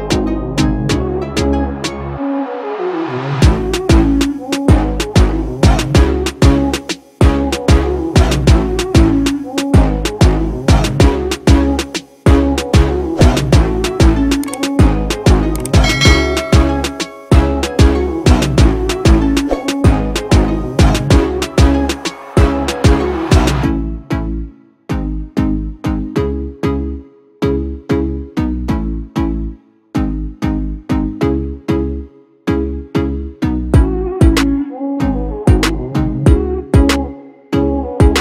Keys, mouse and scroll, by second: 26.1 ctrl+-, 26.4 ctrl+-, 26.6 ctrl+-, 26.8 ctrl+-, 31.6 alt+shift+click.